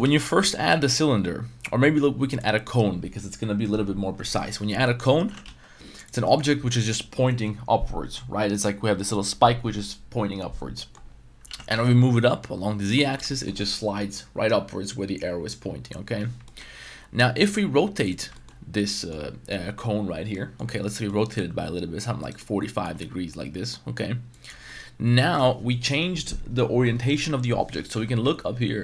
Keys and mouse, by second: 0.0 x, 0.4 shift+a, 4.8 middle drag, 5.2 g, 5.4 z, 6.2 middle click, 10.9 middle click, 11.4 g, 11.7 z, 13.3 shift+middle drag, 16.4 shift+middle click, 17.4-18.2 drag, 18.3 shift+middle drag, 18.9 middle drag, 20.3 middle drag, 21.1-21.4 middle drag, 21.5 r, 22.2 right click, 22.4 middle click, 22.9 r, 24.6-25.3 middle drag, 27.9 n, 28.2 n.